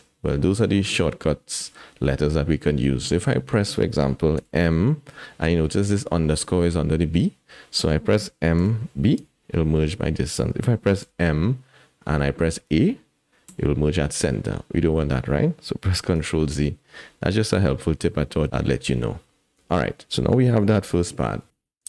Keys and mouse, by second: 4.4 m, 8.6 m, 11.0 m, 16.1 ctrl+z, 17.2 click, 19.6 Tab, 20.0 click, 21.5 KP_1.